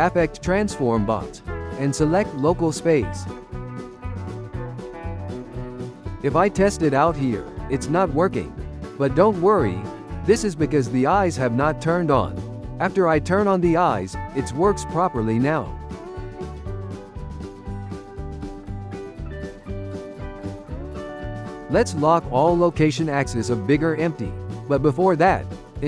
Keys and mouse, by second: 4.7 n, 5.1-6.1 ctrl+shift+middle drag, 6.1 g, 11.8 click, 13.0 click, 13.6 g, 15.3 click, 15.6 g, 16.7 g, 19.8 click, 21.0 n, 22.3 click, 23.0-24.0 drag, 24.4-25.2 ctrl+shift+middle drag, 25.2 click.